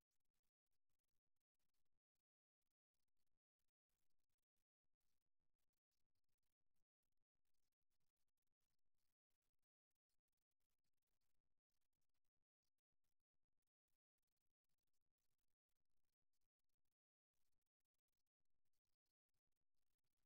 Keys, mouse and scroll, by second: 3.3 right click, 3.7-6.0 middle drag, 8.1 right click, 8.6-13.6 middle drag, 13.2 KP_3, 15.9 g, 18.3-20.2 drag, 19.5 g.